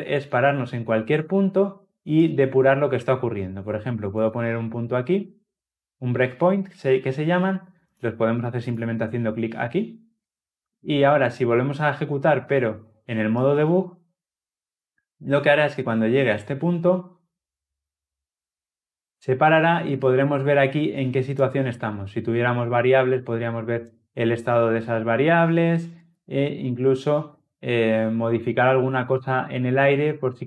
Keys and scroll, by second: 4.1 ctrl+F8, 8.5 ctrl+F8, 13.3 shift+F9.